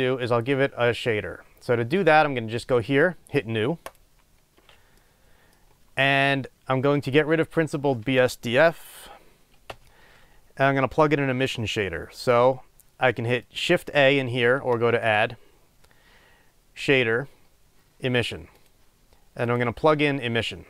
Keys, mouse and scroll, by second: 0.0-2.4 scroll down 2, 2.4-4.1 scroll down 1, 4.1 click, 9.6 Delete.